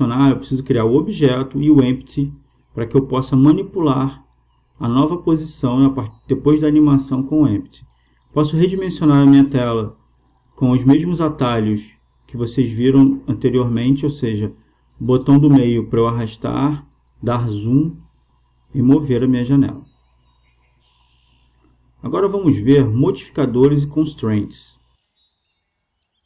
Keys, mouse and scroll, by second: 7.6-9.4 drag, 14.0 middle click, 18.9-20.7 drag.